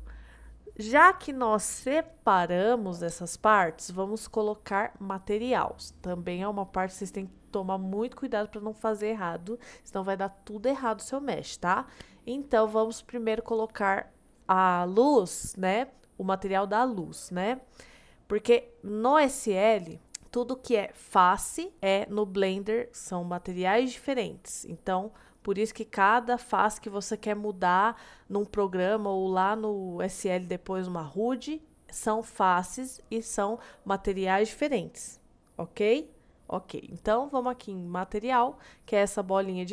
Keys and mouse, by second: 37.4 click.